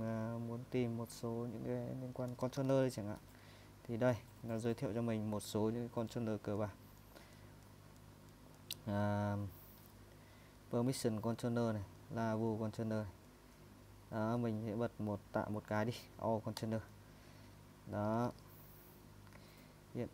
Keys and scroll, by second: 2.0-3.7 typing, 6.6 Up, 7.0 Up, 7.3 Up, 7.6 Up, 8.3 Up, 8.5 Up, 9.3 Down, 9.7 Down, 10.6 Down, 12.0 Down, 12.5 Up, 13.3 Up, 15.8 Down, 16.6 Return, 18.1-20.1 typing.